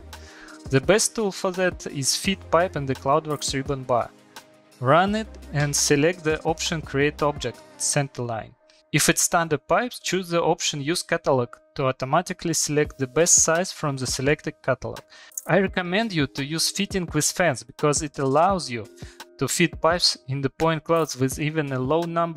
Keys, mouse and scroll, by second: 0.1 middle click, 0.2 middle click, 2.4 click, 4.3 click, 5.0 click, 5.5 click, 5.9 click, 8.5 click, 9.0 click, 9.8 click, 11.7 click, 13.7 click, 14.6 scroll, 15.6 shift+middle click, 16.0 click, 16.3 click, 16.9 click, 17.2 middle click, 17.3 middle click, 18.0 middle click, 18.4 click, 18.9 click, 19.4 click, 20.1 middle click, 20.9 shift+middle click, 21.1 middle click, 21.4 click, 21.7 click, 22.2 click.